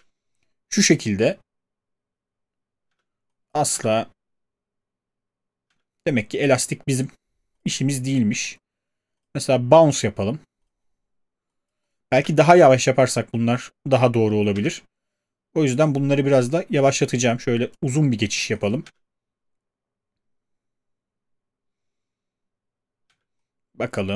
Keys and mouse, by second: 2.9 space, 3.7 space, 5.7 space, 14.5 space, 18.9 space, 23.1 space.